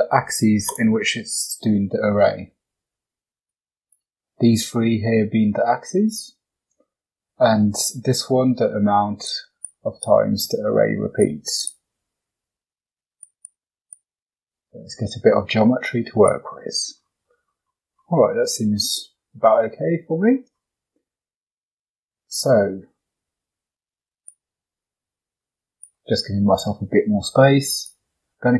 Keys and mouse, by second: 3.3 click, 3.8 click, 9.1 click, 9.5 click, 9.9 click, 11.1 click, 11.5 click, 13.1 click, 13.3 click, 13.8 click, 16.2 click, 17.2 middle drag, 18.3 shift+middle drag, 18.7 middle drag, 24.0 click, 24.8-25.8 drag, 27.5 click.